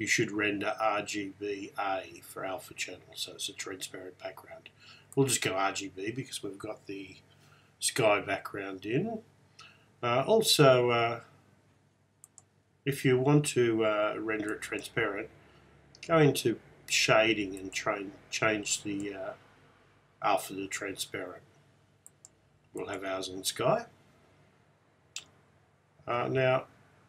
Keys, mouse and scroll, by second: 5.2 click, 12.3-14.2 drag, 14.6-16.3 drag, 17.7-19.5 drag, 22.2 click.